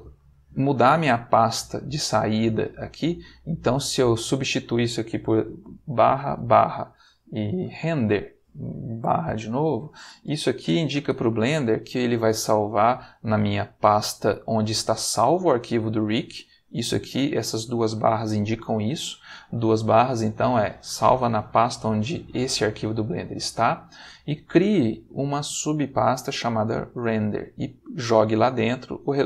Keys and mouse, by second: 4.4 click, 5.9 /, 7.3-8.5 typing, 10.6 Return.